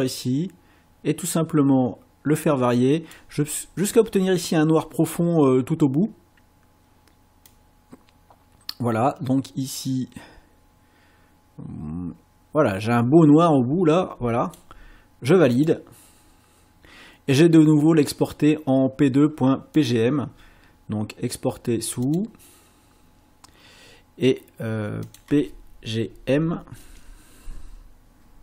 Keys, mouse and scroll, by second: 7.5-14.7 drag, 15.5 click, 19.8 click, 22.0 click, 25.0 click, 26.8 BackSpace.